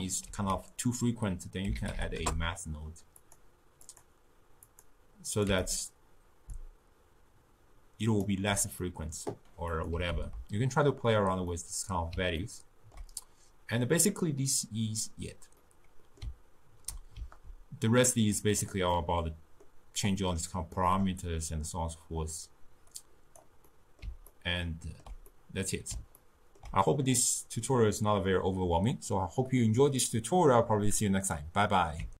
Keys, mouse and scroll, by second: 0.3 ctrl+a, 3.9-5.8 drag, 6.6-9.6 shift+drag, 9.8 click, 10.2 ctrl+x, 11.6 middle click, 12.4 ctrl+scroll down 1, 12.6-15.5 ctrl+middle drag, 15.6-18.1 middle drag, 18.1-19.0 drag, 19.0-23.0 middle drag, 23.0-23.8 drag, 23.8-30.0 middle drag.